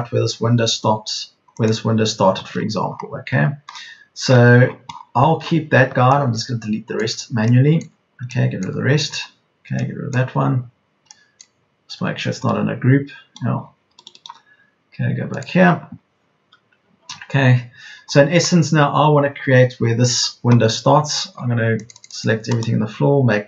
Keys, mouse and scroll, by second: 7.1 Delete, 7.8 Delete, 8.5 Delete, 10.1 Delete, 14.1 Delete, 23.3 Delete.